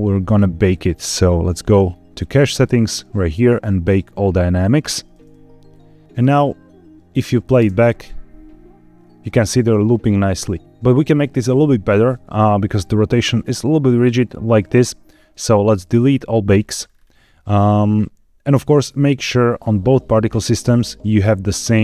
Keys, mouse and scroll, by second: 0.1-0.5 scroll down 3, 1.7-2.5 scroll up 2, 2.5 click, 3.7 click, 5.6 click, 6.1-7.1 drag, 7.5 space, 10.6 space, 12.5-13.8 drag, 15.8 click, 16.7-17.3 scroll up 3, 19.4 click.